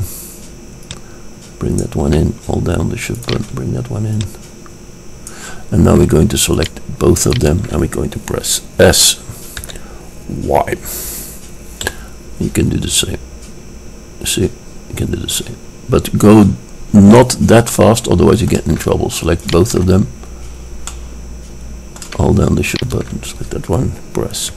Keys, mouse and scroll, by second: 1.0-2.9 drag, 3.4-6.2 drag, 4.6 right click, 6.8-9.3 drag, 9.7 s, 17.8-24.5 drag.